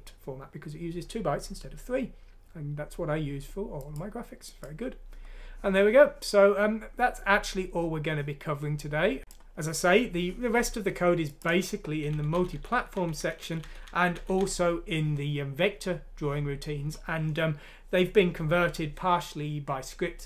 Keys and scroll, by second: 12.1 Page_Down, 12.3 Page_Down, 12.5 Page_Down, 12.7 Page_Down, 13.0 Page_Down.